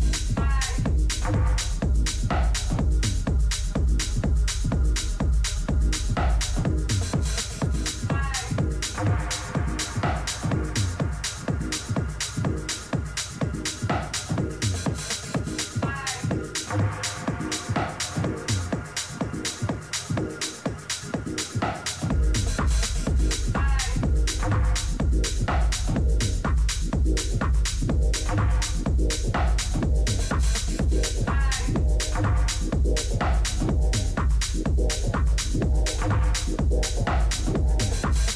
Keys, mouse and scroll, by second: 8.6-10.6 right drag, 10.1 t, 11.4-19.4 drag, 18.4-20.4 middle drag, 20.1 t, 20.5 middle click, 20.9 a, 21.7-29.7 middle drag, 34.2-36.6 middle drag, 37.9-38.3 middle drag.